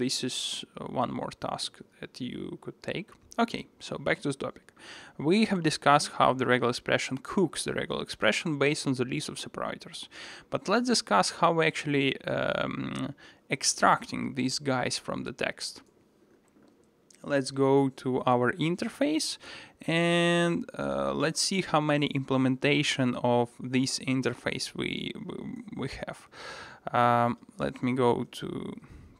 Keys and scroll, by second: 0.7 alt+super+[, 1.2 alt+super+[, 16.8 super+b, 25.7 alt+super+[, 26.4 alt+super+[, 28.2 alt+super+[, 28.4 super+1.